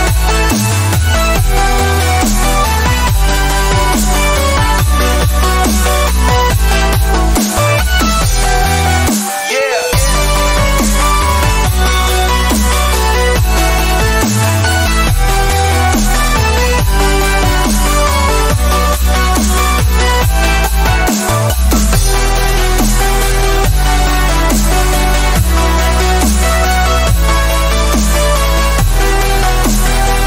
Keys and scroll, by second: 4.3 ctrl+z, 8.7 alt+space, 13.5 space, 15.0 ctrl+z, 15.7 ctrl+z, 16.2 ctrl+z, 21.2 space, 23.1 space, 24.2 space, 26.9 ctrl+z, 27.3 x, 28.7 x, 29.7 space.